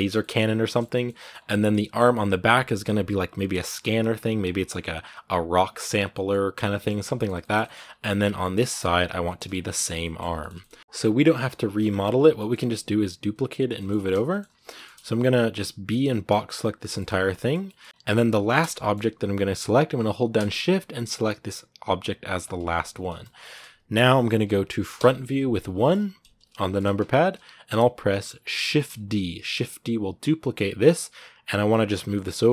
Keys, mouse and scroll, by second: 1.1 scroll up 2, 1.3-2.3 middle drag, 2.3 click, 3.1-5.8 middle drag, 5.8 scroll down 1, 5.9 middle click, 6.5 scroll down 1, 6.6-8.7 middle drag, 8.7 click, 9.0-14.2 shift+middle drag, 14.2-14.5 scroll up 2, 14.5-16.4 shift+middle drag, 16.4 b, 16.6-17.8 shift+middle drag, 17.8-18.2 scroll up 3, 18.2 shift+middle click, 18.4 scroll up 2, 18.6-22.2 middle drag, 22.2 shift+right click, 22.5 scroll down 2, 23.1 scroll down 5, 23.2-24.8 shift+middle drag, 24.8 KP_1, 25.6 shift+middle click, 26.5-28.4 shift+scroll down 1, 28.5 shift+d.